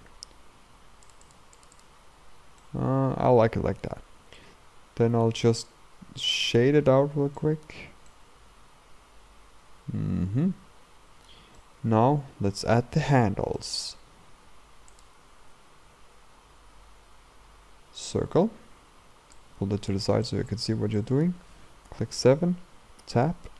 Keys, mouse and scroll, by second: 0.0 click, 1.1-2.6 drag, 2.6-4.8 middle drag, 4.8-5.5 scroll up 1, 5.5-7.4 right drag, 7.4-14.2 middle drag, 14.2-14.9 scroll down 2, 14.9 click, 15.3 shift+a, 19.4 click, 20.3-21.9 shift+middle drag, 21.9 KP_7, 23.0 Tab, 23.4-23.5 scroll up 3.